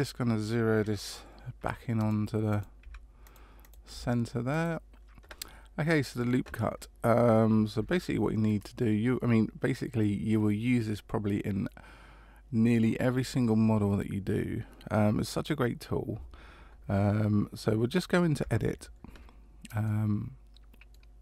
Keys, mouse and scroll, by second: 2.5 click, 3.6 click, 18.5 Tab, 19.8 middle click.